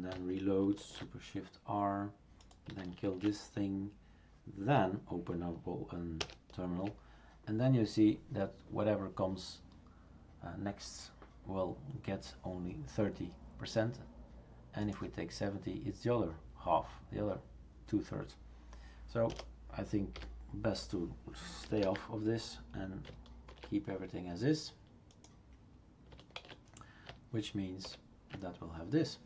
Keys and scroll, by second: 0.8 shift+super+r, 3.1 shift+super+q, 6.2 super+Return, 19.3 BackSpace, 20.3 typing, 21.8 ctrl+s, 23.5 shift+super+r, 26.4 shift+super+q, 27.8 super+Return.